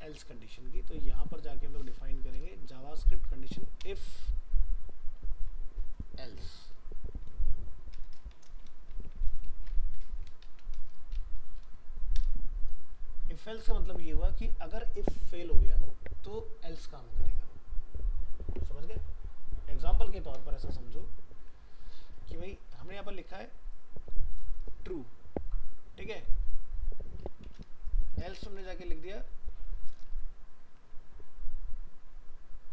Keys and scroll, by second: 1.8 alt+f, 1.9 alt+移.